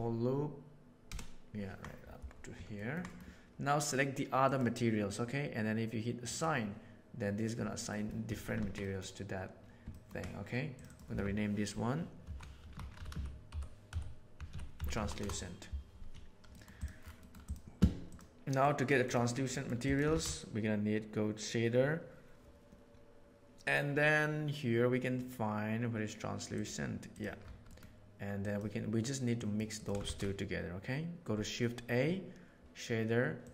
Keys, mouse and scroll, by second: 1.0 ctrl+KP_Add, 2.7 ctrl+middle click, 3.0 middle click, 6.2 click, 7.8 middle click, 8.2 Tab, 8.5 alt+a, 8.7 middle click, 9.9 ctrl+middle click, 10.7-15.7 drag, 16.5 middle click, 16.7 click, 17.4 click, 18.0 click, 18.5 click, 19.4 middle click, 19.8 click, 20.0 shift+a, 27.7 middle click, 28.3 drag, 29.3 click, 29.7 click.